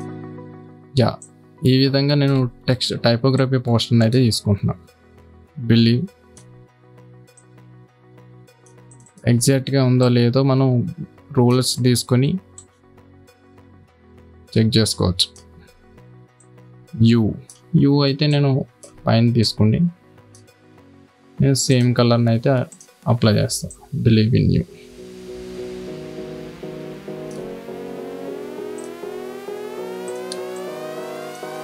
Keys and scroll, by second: 3.2 ctrl+t, 30.9 space.